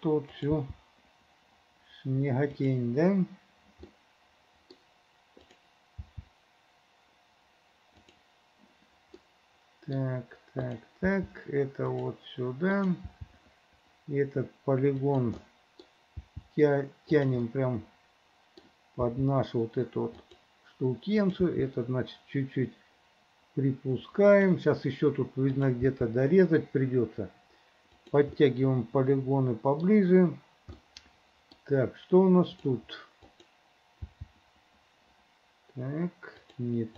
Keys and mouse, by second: 0.5 click, 0.8 g, 4.0 middle click, 6.1 g, 9.4 middle click, 10.7 click, 11.2 g, 12.9 click, 13.2 g, 15.6 middle click, 16.4 g, 17.6 middle click, 18.4 click, 19.1 g, 21.3 click, 21.9 g, 25.6 click, 26.0 g, 28.6-30.0 middle drag, 31.0 middle click, 31.4 click, 33.4 click, 34.2 g.